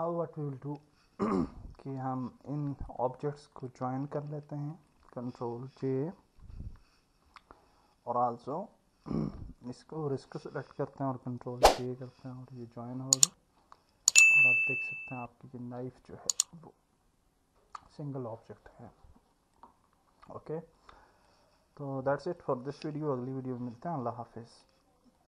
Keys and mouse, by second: 0.6 click, 2.8 shift+click, 3.5 shift+click, 4.7 shift+click, 6.4 ctrl+j, 8.3 click, 11.6 ctrl+j, 14.1 click, 14.7 click, 17.7 click, 20.8 click.